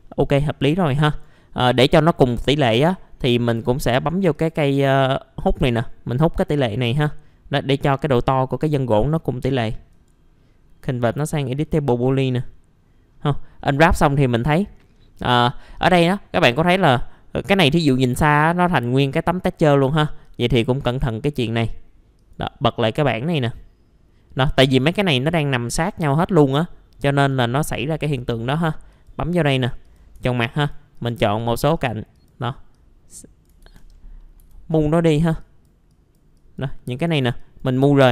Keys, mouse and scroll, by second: 1.1 click, 1.7 scroll down 1, 2.1 middle click, 2.4-2.7 scroll up 1, 2.7 F4, 4.3 click, 7.2-7.6 scroll up 1, 7.6-8.0 scroll down 2, 7.7 middle click, 8.0 middle click, 8.3 scroll up 1, 8.8 middle click, 8.9 scroll down 1, 9.9 right click, 11.6 click, 12.2-13.6 scroll up 1, 13.6 middle click, 13.8-14.5 scroll down 1, 15.3 middle click, 16.5 scroll up 1, 17.3-19.8 scroll down 1, 20.2-23.3 drag, 24.5 middle click, 27.3 click, 30.3 ctrl+click, 30.9 ctrl+click, 31.7 ctrl+click, 32.1 ctrl+click, 32.7 click, 33.6 ctrl+z, 34.2 middle click, 34.4 w, 34.7 click.